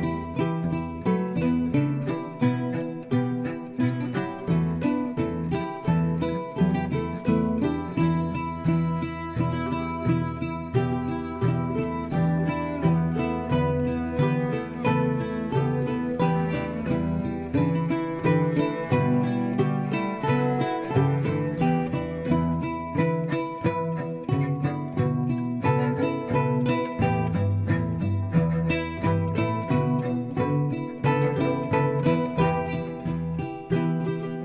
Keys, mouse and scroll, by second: 3.5 shift+d, 9.4 Tab, 9.9 scroll down 1, 10.2 Tab, 10.8 click, 11.9-15.0 middle drag, 20.5-21.0 scroll down 2, 21.0-22.3 middle drag, 22.3-23.3 scroll up 7, 23.3-24.5 shift+middle drag, 24.5-25.0 scroll up 3, 25.0 Tab, 25.7 scroll down 1, 26.0 Tab, 26.7 Tab, 27.7 click, 28.6 shift+click, 30.1 ctrl+j, 31.2 Tab, 31.7-33.9 middle drag, 33.9-34.4 scroll down 4.